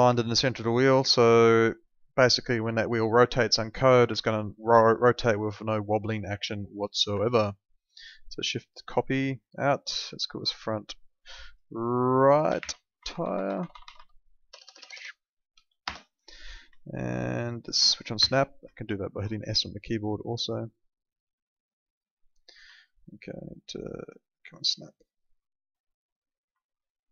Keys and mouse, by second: 0.2 alt+middle click, 2.3 alt+middle click, 3.4 alt+middle click, 4.1 alt+middle click, 5.9 middle click, 6.4 alt+middle click, 7.3 alt+middle click, 8.2 shift+click, 12.6 shift+r, 14.5 BackSpace, 15.4 BackSpace, 15.5 e, 15.8 Return, 16.8 alt+middle click, 18.2 s, 18.7 alt+middle click, 19.4 alt+middle click, 20.6 click, 22.7 alt+middle click, 24.1 click, 26.6 alt+middle click.